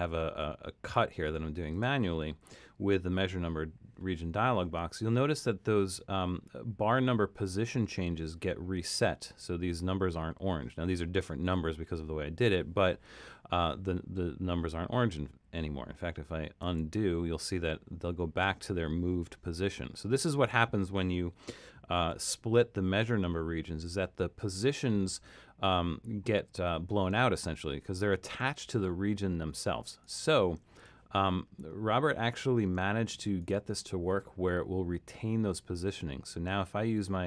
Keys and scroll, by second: 16.6 super+z.